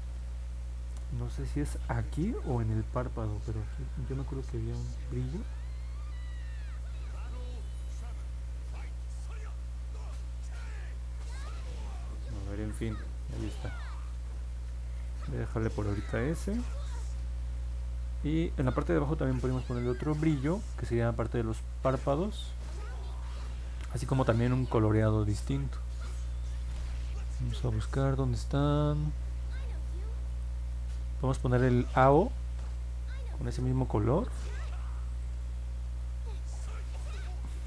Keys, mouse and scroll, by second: 3.6 click, 4.1 click, 4.5 click, 5.1 click, 5.7 click, 6.2 click, 6.7 click, 7.4 click, 8.8 click, 9.6 click, 10.9 click, 12.8 click, 13.2 click, 13.9 click, 14.5 click, 27.2 middle click, 28.6 middle click, 30.2 click, 30.8 middle click, 31.0 middle click, 31.9 click, 35.1 click.